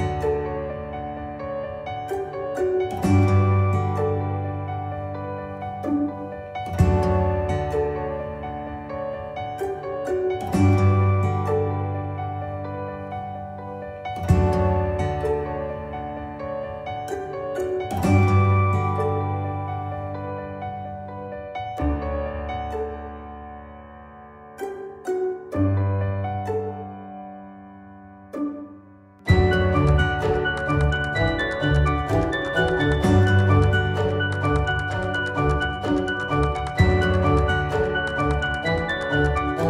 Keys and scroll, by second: 26.0 d.